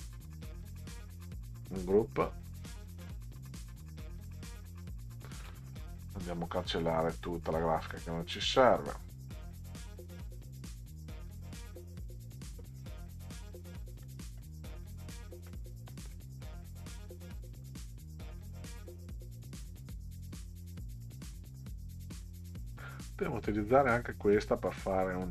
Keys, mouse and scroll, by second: 1.6 click, 2.9 click, 4.8 click, 8.8 click, 10.2 right click, 12.0 click, 13.4 click, 15.5 middle click, 16.8 click, 19.8 click, 22.2 click, 25.0 click.